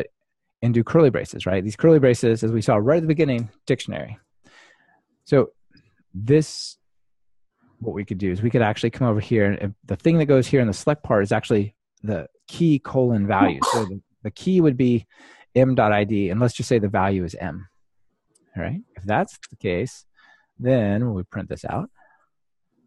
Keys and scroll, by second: 4.3 super+v, 5.5 alt+super+l, 16.7 ctrl+alt+shift+Right, 22.1 ctrl+r.